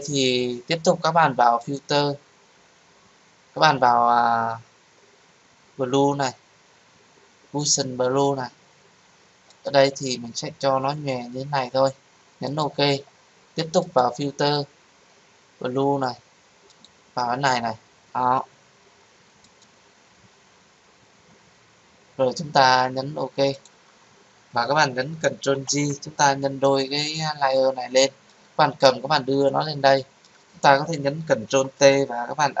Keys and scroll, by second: 25.5 ctrl+j, 31.4 ctrl+t.